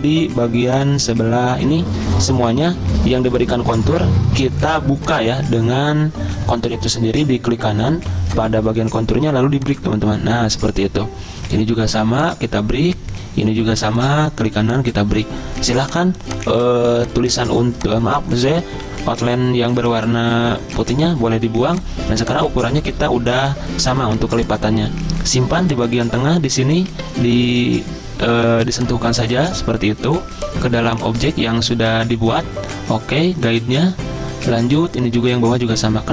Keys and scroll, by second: 18.8 Delete, 20.0 Delete.